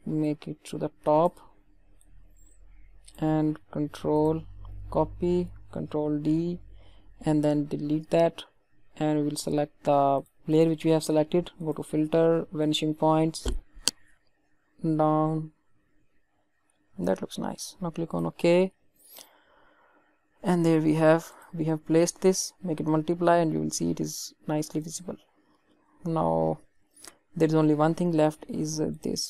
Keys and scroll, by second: 4.7 ctrl+c, 6.0 ctrl+d, 7.9 Delete.